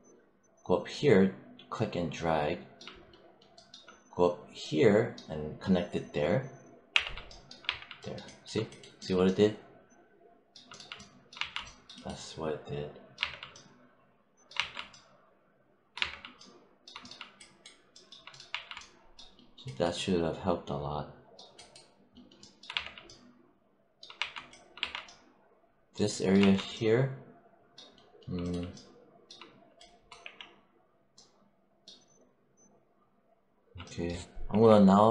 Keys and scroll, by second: 6.8 w, 7.5 3, 11.2 1, 13.1 3, 14.4 1, 18.4 1, 22.6 3, 24.0 1, 24.6 3, 26.2 1, 30.0 4, 34.4 5.